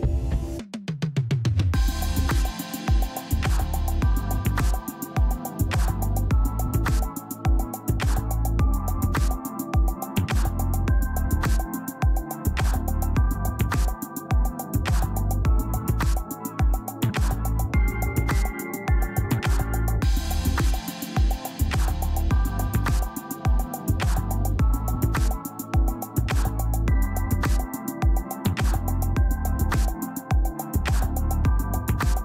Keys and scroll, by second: 0.5 ctrl+alt+z, 2.1 space, 5.3 space, 6.2 space.